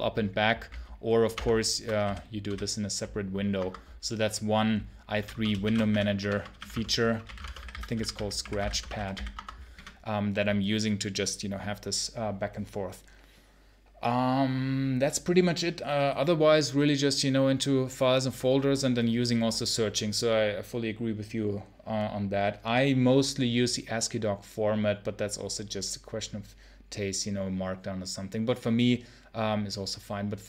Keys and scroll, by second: 1.2 shift+super+space, 1.9 super+h, 2.3 super+l, 3.4 Escape, 5.0-9.6 typing, 5.2 Return.